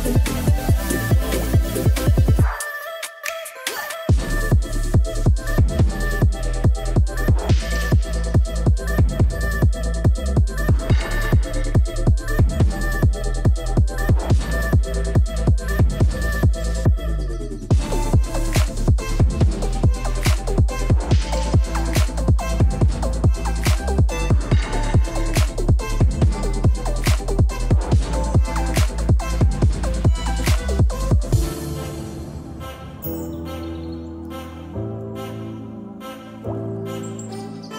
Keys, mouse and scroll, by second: 1.1 o, 36.3 shift+a.